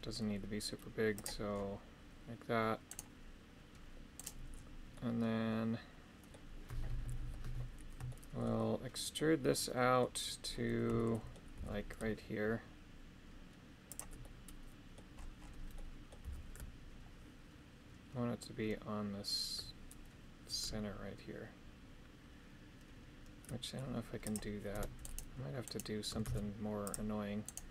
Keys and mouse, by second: 3.0 right click, 4.8-6.3 middle drag, 7.2 KP_7, 8.0 shift+middle click, 9.1 middle click, 10.9 shift+middle click, 11.5 e, 14.2 middle click, 15.7 middle click, 16.2 g, 24.7 Tab, 25.0 right click, 25.6 right click, 26.2 shift+s, 27.4 right click.